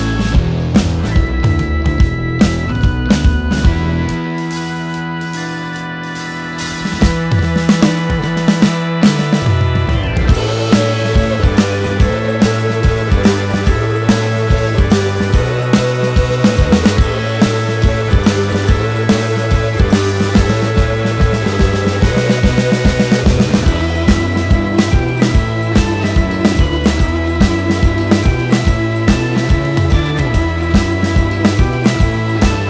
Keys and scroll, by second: 1.7 space, 3.1 p, 11.4 ., 12.6-13.6 typing, 13.7 Escape, 24.7 h, 25.6 space, 29.3 l, 31.1 Escape.